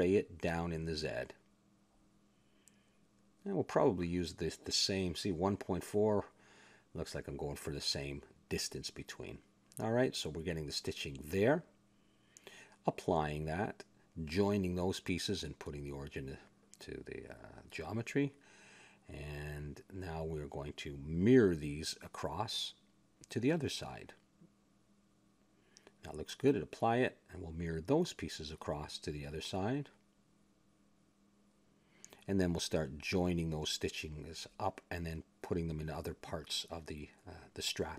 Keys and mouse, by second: 0.4 ctrl+a, 0.4 click, 1.2 click, 2.4 click, 5.4 click, 7.3 click, 7.9 click, 8.5 middle click, 10.8 middle click, 11.8 middle click, 13.2 click, 14.2 middle click, 14.4-15.7 drag, 15.3 ctrl+j, 16.1 click, 17.1-18.3 drag, 18.3 middle click, 18.6 click, 19.2 shift+s, 19.8 click, 22.7 click, 23.9 click, 24.5 middle click, 27.0 click, 27.8 a, 30.8 click, 32.0 click, 32.9-34.6 middle drag, 34.6 a, 35.6 click, 37.6 ctrl+j.